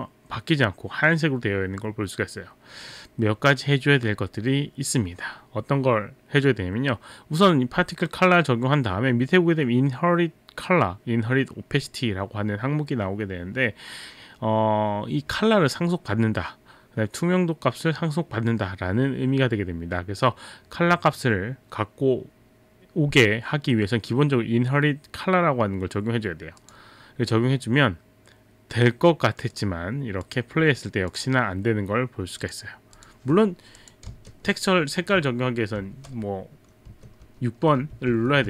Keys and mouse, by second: 26.7 click, 29.5 click, 30.3 click, 31.1 click, 32.4 click, 33.0 click, 33.8 click, 34.1-38.4 typing.